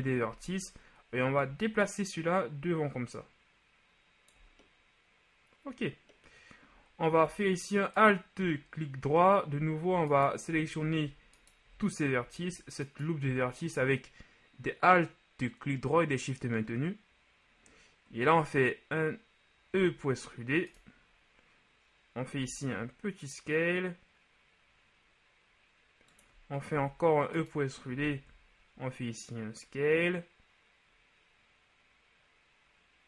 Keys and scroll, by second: 12.5 typing, 19.8 e, 22.4 s, 26.7 shift+e, 27.9 s.